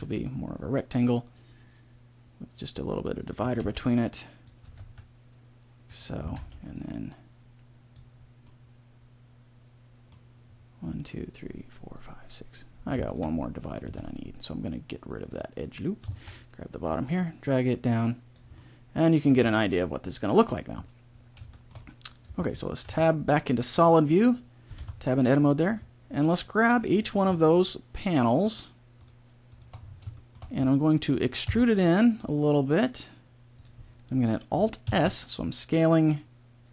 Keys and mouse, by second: 3.4 a, 3.6 b, 4.6 g, 6.2 a, 6.4 b, 8.4-9.4 middle drag, 13.8 x, 16.8-18.0 middle drag, 18.5 click, 18.6 middle click, 18.8 middle click, 19.3 a, 22.2 Tab, 22.8 z, 24.7 Tab, 26.9-28.0 middle drag, 31.4 e, 34.8 alt+s.